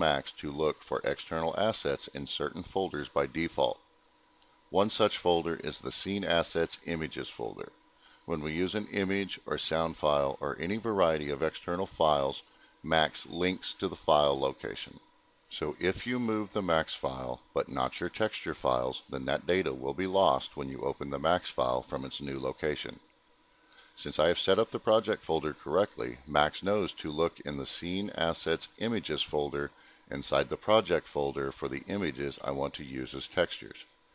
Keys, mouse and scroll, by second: 12.9 click, 17.1 click, 27.2 click.